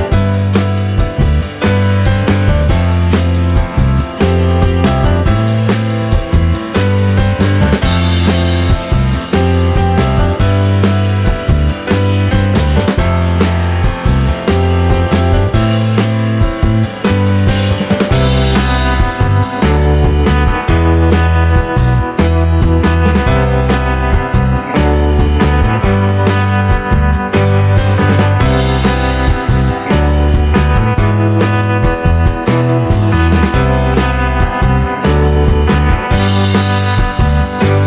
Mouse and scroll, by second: 0.4 click, 1.1-1.4 scroll down 2, 2.5 click, 7.0 click, 8.2 click, 12.7 click, 14.9 click, 16.4 click, 17.2 click, 17.5-18.6 drag, 19.2 click, 20.7 click, 23.3 click, 24.5-25.2 drag, 25.9 click, 28.7 click, 28.9 click.